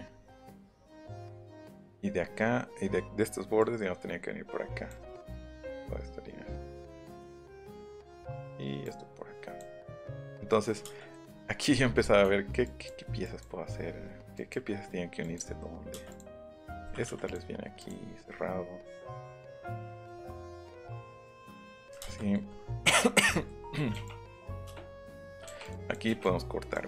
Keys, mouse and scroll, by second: 0.3 shift+middle click, 1.9 click, 3.5 click, 5.7-6.9 drag, 8.8 click, 9.9 e, 11.7 scroll up 1, 12.0 scroll down 1, 12.2 e, 12.6 click, 13.2 click, 13.6 scroll down 1, 13.8 scroll up 1, 13.9 scroll down 1, 14.3 click, 15.2 click, 15.9 space, 16.0 click, 16.7-17.0 scroll up 2, 16.8 m, 17.0 Escape, 17.3 click, 17.8 click, 18.0 scroll down 2, 18.1 middle click, 18.7 middle click, 18.9 middle click, 19.4 middle click, 19.7 middle click, 20.1 e, 22.0 space, 24.0 click, 25.1 ctrl+z, 25.4 l, 25.6 click, 26.2 click.